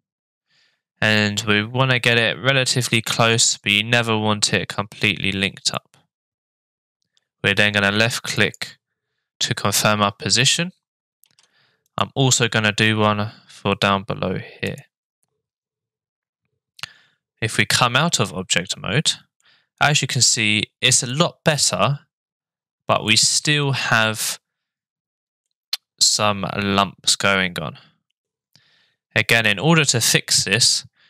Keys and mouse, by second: 11.2 ctrl+r, 18.3 Tab, 19.4-20.0 middle drag, 21.1-21.7 middle drag, 23.1-23.6 middle drag, 25.5-28.2 middle drag, 28.7 Tab.